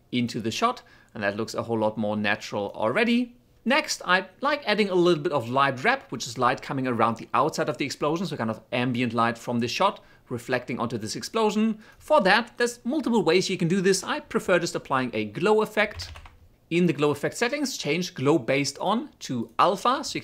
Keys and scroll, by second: 14.1-15.1 typing.